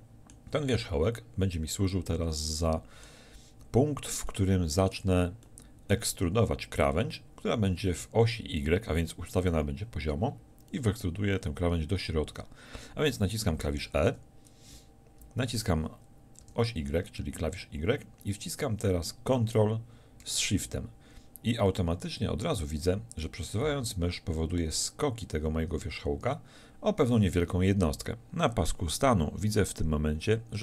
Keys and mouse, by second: 4.3 middle click, 14.1 e.